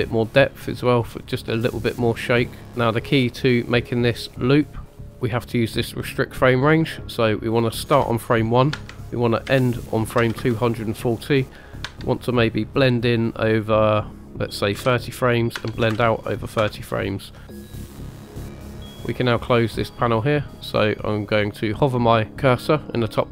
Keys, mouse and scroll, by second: 0.2 click, 1.6 click, 4.9 space, 5.1 click, 6.5 click, 7.3-14.7 drag, 17.8 middle click, 18.1 click, 18.6 click.